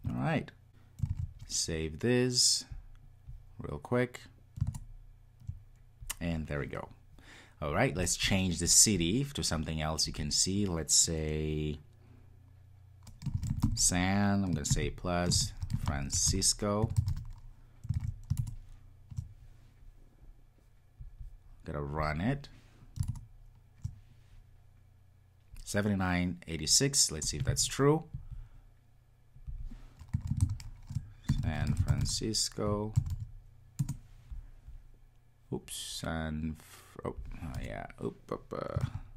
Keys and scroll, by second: 1.1 super+s, 18.0 super+s, 22.0 ctrl+r.